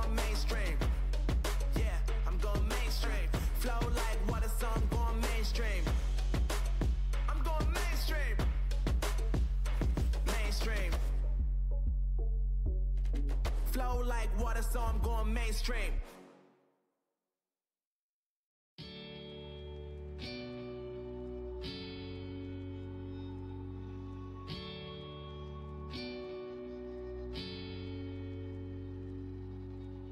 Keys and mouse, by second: 0.1 click, 0.9-2.1 drag, 8.3 middle click, 9.1-10.7 drag, 10.7 f, 17.2-19.5 drag, 23.6-28.2 drag.